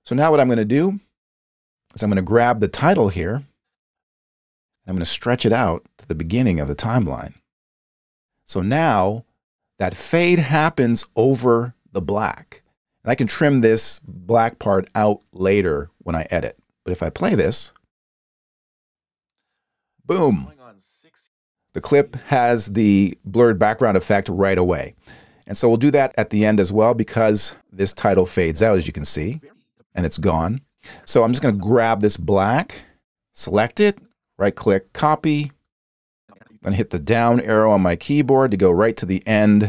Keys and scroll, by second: 17.6 space, 21.2 space, 37.7 Down.